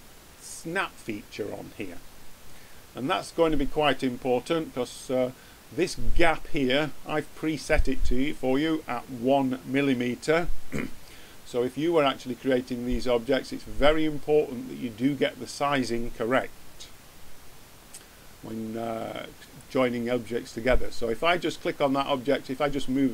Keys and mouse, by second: 19.5-21.5 drag.